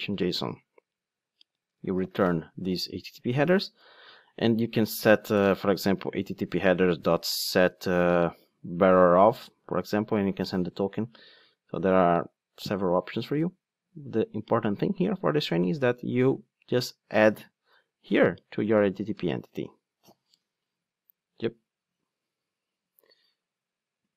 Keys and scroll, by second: 4.0 alt+super+l, 6.6 Return, 11.3 super+x, 15.9 super+c, 18.2 super+v.